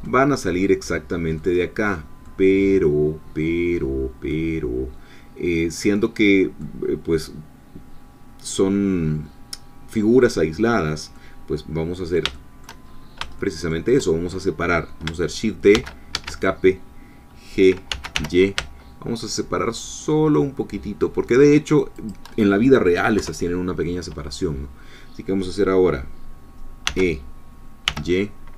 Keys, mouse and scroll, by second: 0.0 shift+middle click, 0.7 click, 1.4-6.8 drag, 11.2-12.8 middle drag, 13.4 shift+click, 15.7 shift+d, 16.2 shift+Escape, 17.9 g, 18.1 y, 22.0 shift+click, 23.2 3, 26.8 e, 27.9 y.